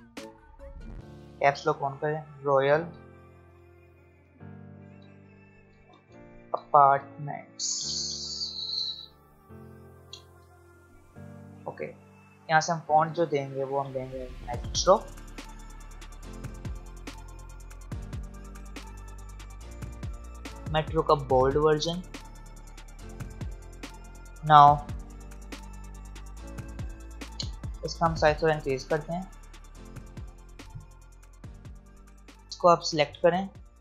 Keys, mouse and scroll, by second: 1.4-3.5 typing, 4.9 Return, 5.5-8.9 typing, 12.1-14.5 drag, 14.2-15.6 typing, 24.2 click, 25.9 click, 28.6 click, 31.7-33.8 drag.